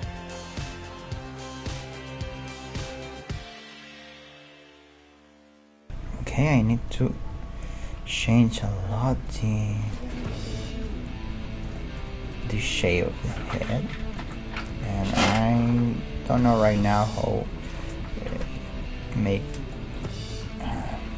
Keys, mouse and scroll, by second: 1.4 middle click, 1.7 a, 2.0-5.5 drag, 3.3 z, 4.3 middle click, 4.4 z, 5.9 \, 6.8-8.2 middle drag, 8.3 g, 9.9-14.2 right drag, 10.8 g, 13.3 g, 14.2 middle click, 14.7 g, 16.0-17.5 right drag, 16.2 g, 17.7-20.0 right drag, 17.9 g, 18.8 g.